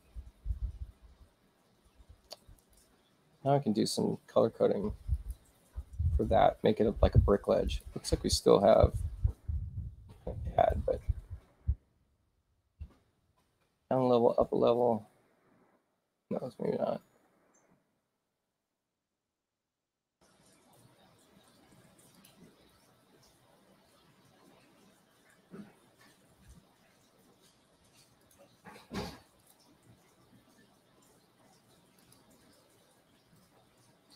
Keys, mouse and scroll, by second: 2.5 click, 5.1 click, 7.6 click, 8.7 Return, 9.2 Return, 9.6 Return, 10.5 click, 11.0 Return, 11.3 Return, 12.7 shift+i, 14.7 click, 16.2 shift+u, 17.1 click, 22.1 click, 28.2 click, 29.4 click, 32.0 click.